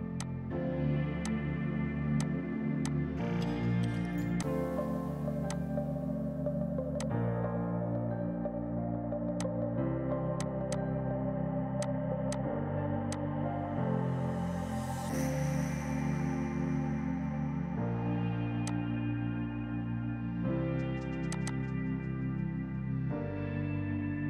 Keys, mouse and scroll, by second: 3.7 Delete, 4.4 click, 5.9 space, 6.3 F3, 6.9 F2, 7.0 click, 15.5 F5, 18.6 click, 21.3 click.